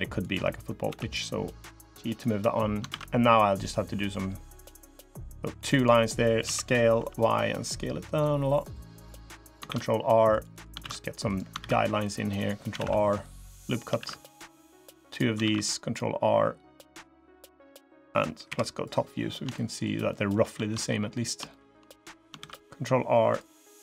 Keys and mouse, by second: 0.6 g, 2.6 ctrl+r, 6.2 s, 9.4 ctrl+r, 10.6 ctrl+r, 11.5 ctrl+r, 12.6 ctrl+r, 13.9 ctrl+r, 15.3 ctrl+r, 18.2 KP_7, 19.3 shift+click, 19.8 shift+click, 21.3 shift+click, 22.1 ctrl+r.